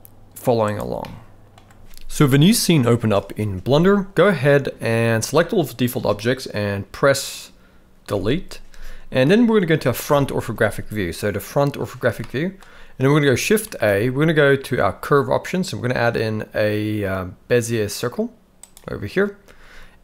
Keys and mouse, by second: 1.0-1.6 middle drag, 5.3-5.9 drag, 8.1 Delete, 10.0 KP_1, 12.2-12.6 shift+middle drag, 13.6 shift+a.